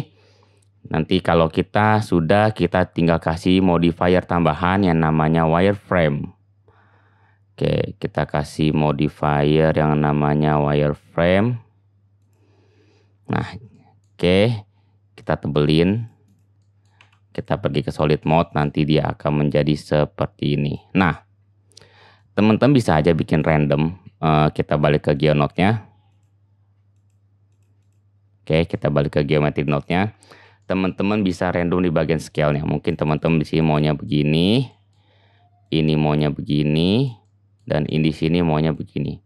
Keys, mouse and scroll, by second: 2.6-4.4 middle drag, 4.4-16.4 drag, 16.4-18.1 middle drag, 17.0 z, 18.1 shift+click, 18.2-19.7 middle drag, 19.7-23.5 drag, 23.5-25.2 middle drag, 25.2 click, 25.3-27.0 middle drag, 27.0 click, 27.1 middle click, 27.8-39.2 drag.